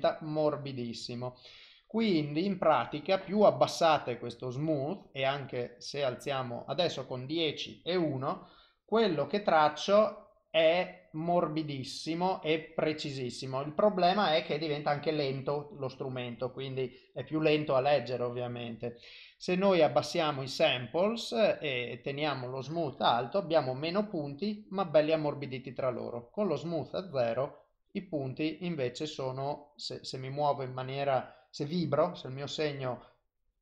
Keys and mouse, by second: 0.0 shift+click, 1.8 click, 4.0 click, 8.1 click, 9.6 click, 14.4 click, 16.0 click, 16.9 click, 17.4 click, 22.7 click, 25.7 click, 27.0 click, 30.1 click, 32.1 click.